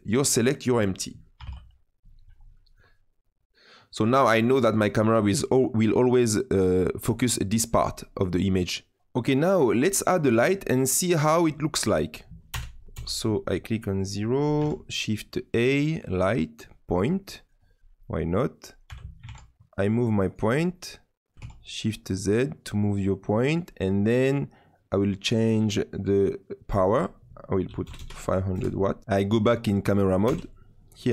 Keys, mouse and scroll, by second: 12.8 click, 12.9 KP_0, 13.5-14.0 scroll down 6, 14.0-14.5 middle drag, 14.5 shift+a, 17.3 middle click, 17.5-17.9 scroll down 5, 17.9 middle click, 18.8 g, 20.7 middle click, 21.3 g, 25.4-27.9 drag, 27.9 KP_0, 29.0 KP_0, 30.2 KP_0.